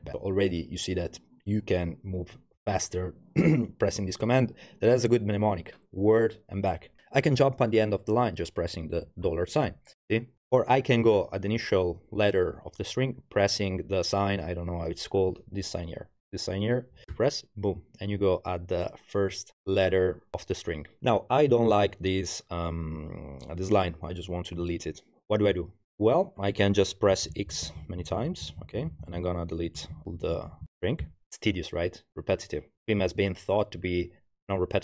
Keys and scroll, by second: 0.0-0.1 typing, 9.3 shift+4, 17.1 shift+ì, 21.0 Page_Down, 27.1-31.1 typing.